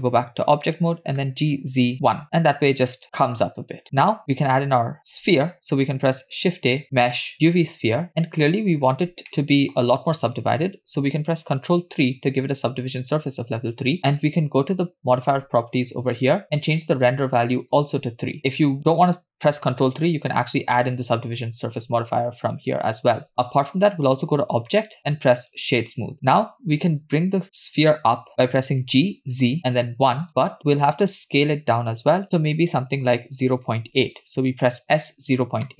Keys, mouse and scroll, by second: 1.9 g, 6.2 shift+a, 8.9-9.3 scroll up 3, 9.3-10.5 middle drag, 12.2 ctrl+3, 17.7 click, 18.0 click, 21.5 click, 24.4-25.7 drag, 29.1 g, 32.9 s.